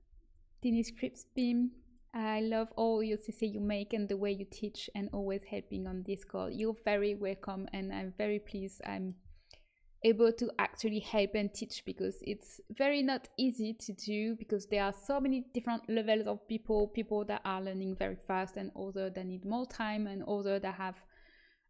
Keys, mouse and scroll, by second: 8.8-13.9 middle drag, 19.3 middle click.